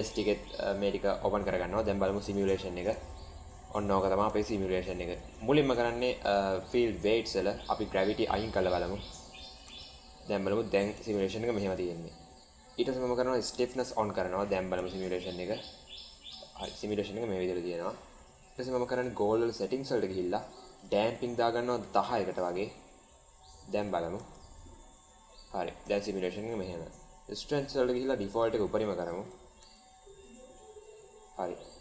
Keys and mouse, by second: 2.1 drag, 2.8 space, 5.1 click, 5.1 space, 6.5 click, 7.8 click, 9.3 drag, 9.5 space, 11.1 space, 11.6 click, 13.4 click, 14.4 click, 14.7 space, 16.4 space, 16.7 click, 20.7-22.7 drag, 23.7 click, 24.0 space, 25.7 space, 26.2 click, 27.9 click, 29.1 click, 29.4 space.